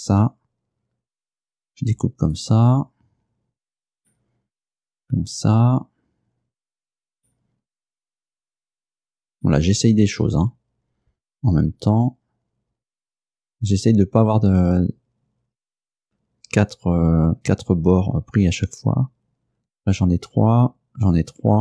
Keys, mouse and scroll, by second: 2.4 right click, 4.0 right click, 7.2 right click, 8.4 right click, 9.4 right click.